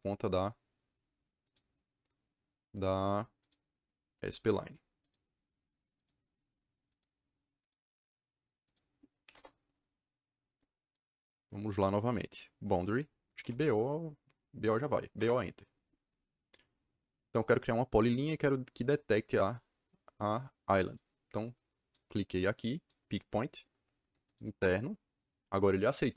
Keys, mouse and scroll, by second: 0.2 click, 1.4 click, 3.3 click, 4.9 click, 5.9 click, 6.8 click, 7.6 click, 8.6 click, 9.2 c, 13.1-13.9 typing, 15.1 Return, 20.9 click, 21.4 click, 24.2 click.